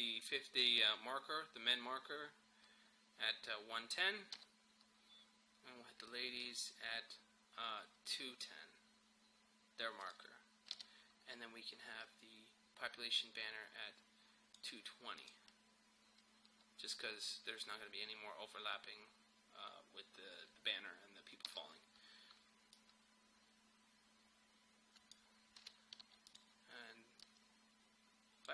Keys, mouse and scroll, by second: 4.4 [, 6.4-10.1 drag, 10.8 [, 12.0-15.2 drag, 21.5 [, 22.8-25.6 drag, 25.6 -, 26.4-28.5 drag.